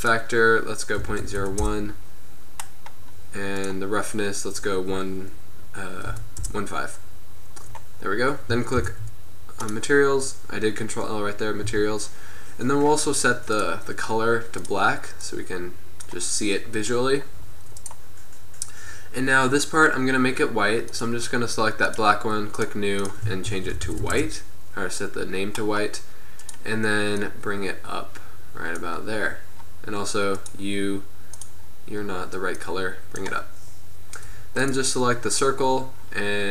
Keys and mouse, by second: 0.0-2.0 middle drag, 3.6-5.3 middle drag, 9.3 ctrl+l, 11.7 z, 13.7-14.9 drag.